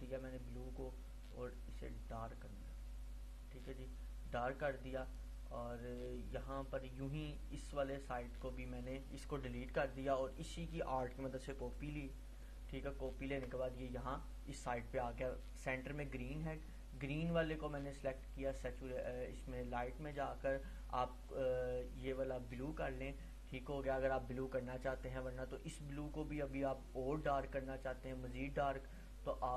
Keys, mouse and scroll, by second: 7.3-12.2 drag, 9.6 click, 12.4-13.7 alt+drag, 16.2 click, 28.3-29.5 drag.